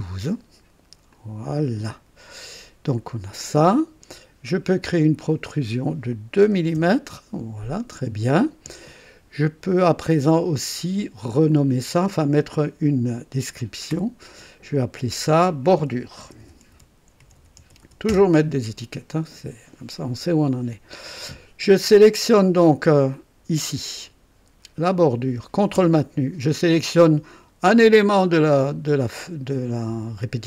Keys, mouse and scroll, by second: 1.1 click, 5.1 click, 6.4 KP_2, 6.7 KP_Enter, 11.5 click, 13.9 F2, 15.9-18.7 typing, 23.1 click, 24.9 click.